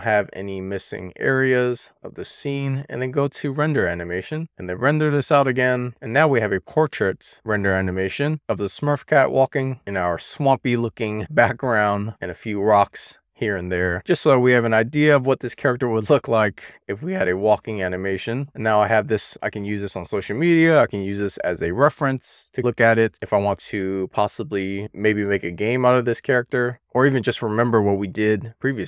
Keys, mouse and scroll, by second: 0.6 click, 2.9-4.4 drag.